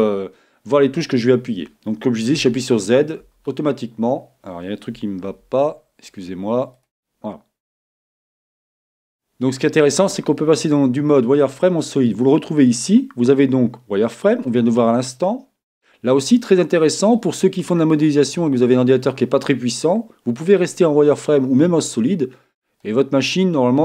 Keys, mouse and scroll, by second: 2.4 z, 3.2 z, 5.3 n, 5.6-7.8 middle drag, 6.7 n, 7.8 click, 7.8 n, 8.9-10.7 middle drag, 12.7-14.5 drag, 16.4-18.3 middle drag, 19.7-20.3 scroll up 1, 20.3-22.2 middle drag.